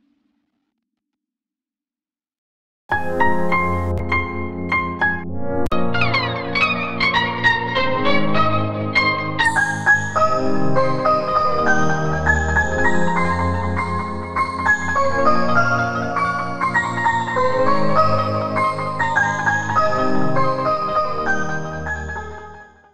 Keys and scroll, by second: 4.0 Return, 5.2 Return, 7.7 q.